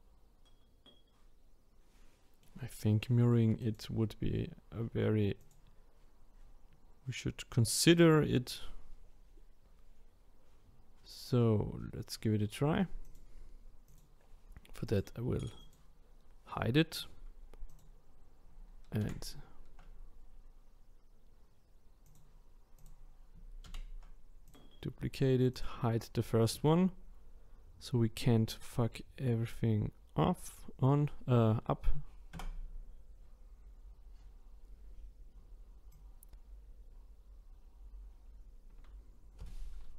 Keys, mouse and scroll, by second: 3.6 click, 5.4 click, 7.9-8.7 scroll down 2, 13.0-14.0 drag, 14.8 click, 15.6 click, 17.7 click, 19.0 shift+d, 22.0 click, 23.9 shift+d, 25.5 click, 32.8 Tab, 35.9 click.